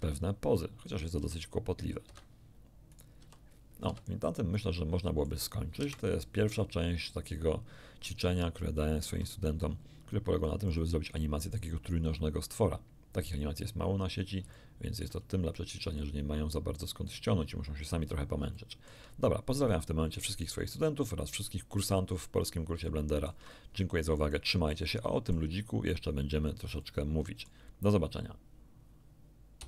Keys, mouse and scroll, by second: 0.8 right click, 1.2 r, 2.0 Escape, 2.9 right click, 3.2 r, 3.9 Escape, 4.2-5.4 middle drag, 5.8 KP_1, 7.9 scroll up 2, 8.6 shift+middle click, 10.7 click, 14.5 ctrl+middle click, 16.0-17.3 drag, 18.2 scroll down 2, 18.6 shift+middle click, 19.7-21.2 shift+middle drag, 21.5-22.6 middle drag, 22.8 shift+middle click, 24.2-25.5 middle drag, 26.4-26.7 scroll down 2, 26.8 middle click, 29.6 q.